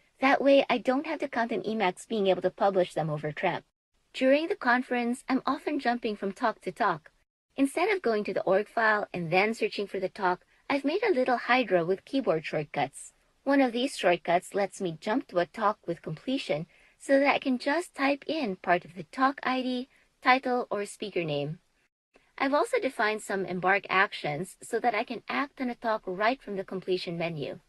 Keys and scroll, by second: 8.4 t, 9.5 t, 12.0 Return, 13.4 super+s, 16.3 t, 17.4 t, 19.9 Return, 21.3 super+s, 22.6 t, 23.4-24.2 Down, 24.6 Down, 25.0 Down, 25.4 Down, 25.9 Up, 26.3 Up, 26.7 Up, 27.1 Up, 27.5 Up.